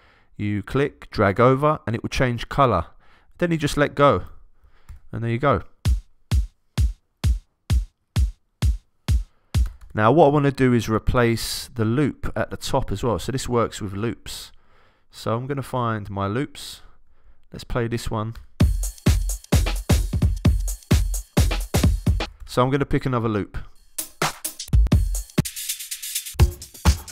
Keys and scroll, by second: 4.9 alt+Return, 5.8 space, 9.6 Return, 18.3 Return, 18.6 space, 22.2 Return, 24.6 Down.